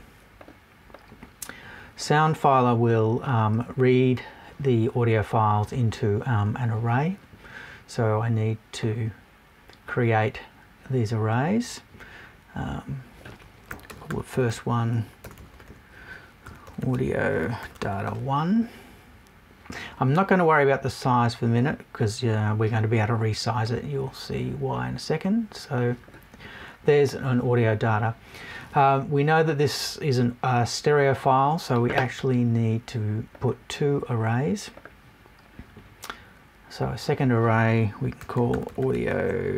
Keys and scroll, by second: 15.2 BackSpace.